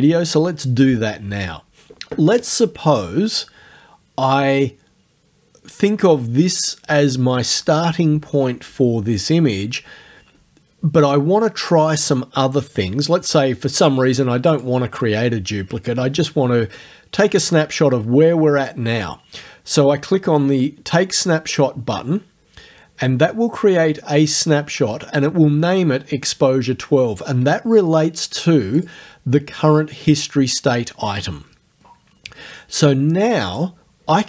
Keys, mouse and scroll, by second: 14.5 click, 18.7 click, 21.5 click, 28.8 click, 33.5 click.